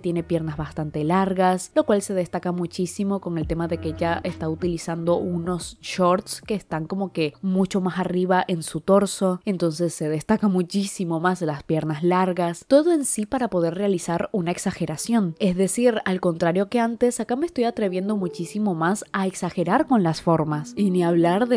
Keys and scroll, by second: 3.7 i, 6.9-10.7 typing, 17.1 ], 17.3 ], 17.7 space, 17.9 ], 19.0 i, 19.7 ctrl+z, 20.1 ctrl+z, 20.1 i.